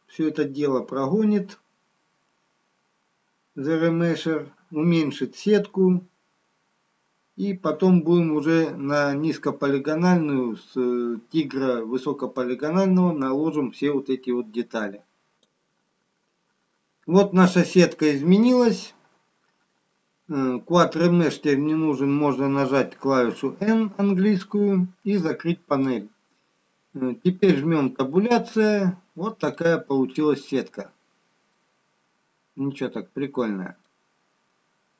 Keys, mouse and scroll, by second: 24.0 n, 28.5 Tab, 29.8 scroll up 3, 31.0 middle click, 34.5 scroll down 1.